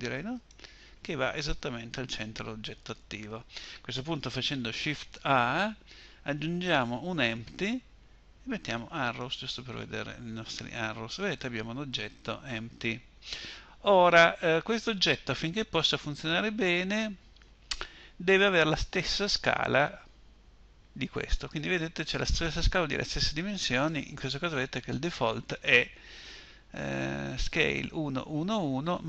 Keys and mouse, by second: 4.2 shift+a.